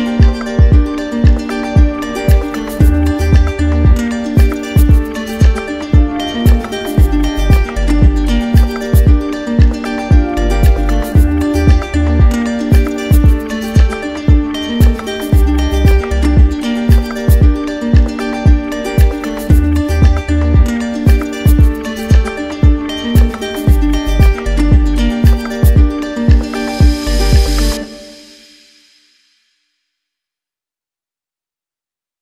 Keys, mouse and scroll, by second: 0.2 click, 0.8 click, 1.9 click, 2.4 click, 5.4 click, 7.8 click, 9.6 click, 9.8 ctrl+z, 11.0 click, 12.1 click, 12.7 alt+click, 14.1 click, 14.5 shift+click, 15.1 alt+click, 15.8 click, 16.3 alt+click, 18.0 alt+click, 18.6 alt+click, 21.2 click, 26.3 click, 28.4 click, 29.7 click, 31.7 ctrl+z.